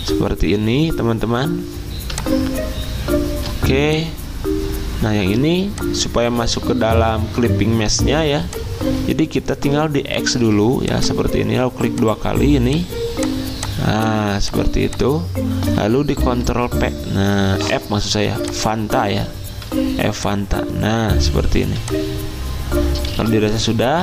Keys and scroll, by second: 10.3 ctrl+x, 16.2 ctrl+f, 23.5 Escape.